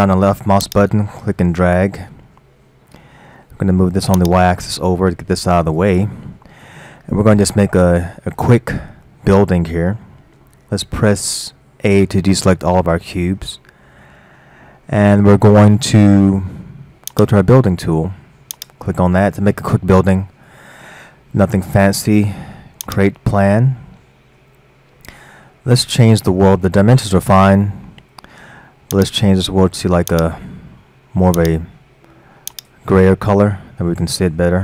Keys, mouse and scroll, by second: 0.7 drag, 2.6-2.9 scroll down 1, 2.9-4.2 middle drag, 4.2-6.2 drag, 6.2-11.1 middle drag, 12.4 a, 17.1-18.7 drag, 22.9-23.5 drag, 23.8-24.9 scroll up 5, 29.0 click, 30.1 click.